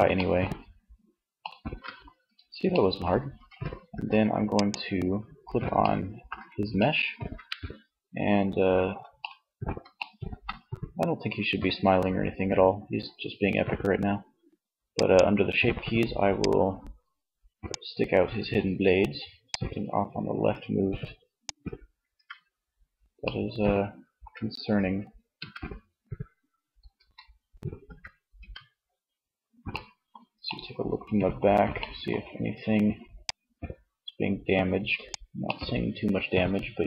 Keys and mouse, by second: 2.4 Tab, 2.9 Tab, 3.5-4.5 drag, 13.0-17.3 drag, 18.7-20.6 drag, 21.2 Tab, 24.3 a, 26.0 z, 26.8 z, 27.4 Tab, 32.4-34.3 drag, 35.0 middle click.